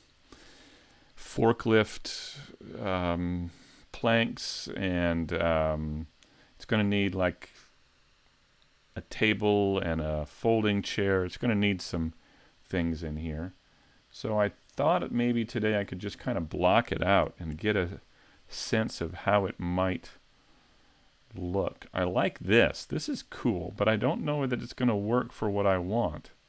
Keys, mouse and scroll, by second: 12.2 click, 13.8-14.4 scroll down 2, 14.4-15.3 scroll down 3, 15.3 scroll down 1, 15.9-16.3 scroll up 1, 16.3-17.5 scroll down 1.